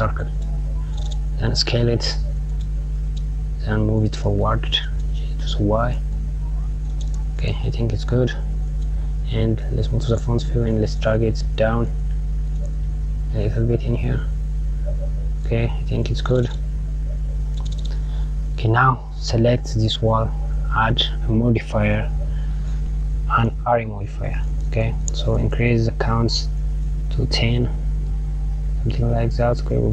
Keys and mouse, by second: 8.2 KP_1, 18.9 click, 20.2-22.7 drag, 25.9-29.9 drag.